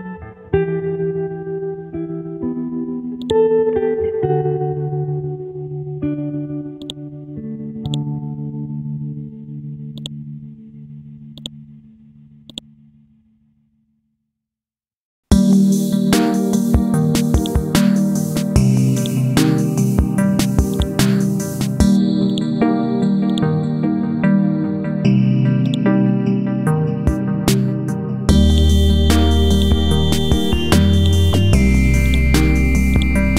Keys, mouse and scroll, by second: 0.1 scroll down 1, 1.3 scroll up 1, 3.2-4.5 drag, 8.9 scroll down 1, 10.0 click, 12.2 ctrl+c, 12.5 click, 12.8 ctrl+v, 14.1 F5, 14.5 ctrl+a, 15.5 typing, 17.4 click, 18.0 scroll up 1, 19.0 click, 21.7-30.8 drag.